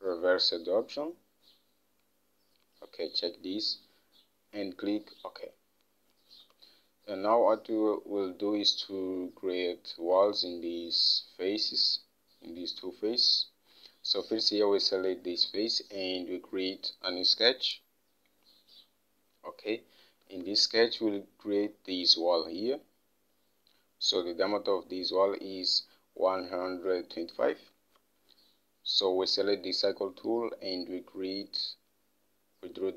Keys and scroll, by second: 6.9 Home, 20.7 alt+Tab, 28.1 alt+Tab.